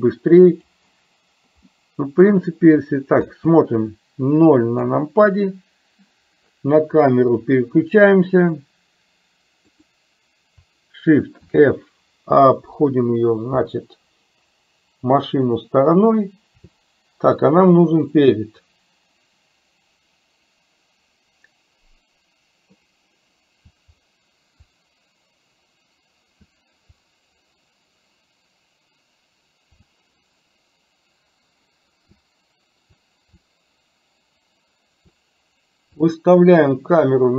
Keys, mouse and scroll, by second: 1.7-2.2 middle drag, 3.4 space, 4.9 KP_0, 9.7 click, 11.5 shift+f.